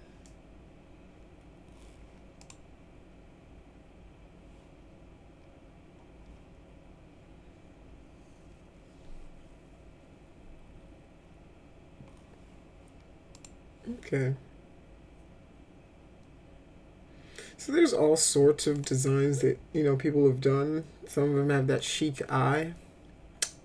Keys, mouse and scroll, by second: 2.4 click, 13.3 click, 18.7 click, 21.8 click.